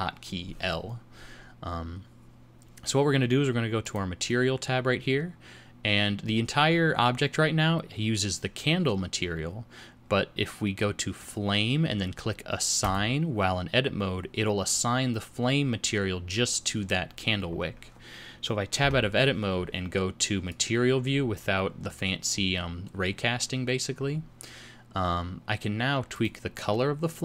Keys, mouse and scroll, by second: 3.8 click, 11.2 click, 12.8 click, 17.6 scroll up 1, 18.8 Tab, 20.7 click, 21.9-22.4 scroll down 3, 22.4-23.6 scroll up 4, 26.3 click.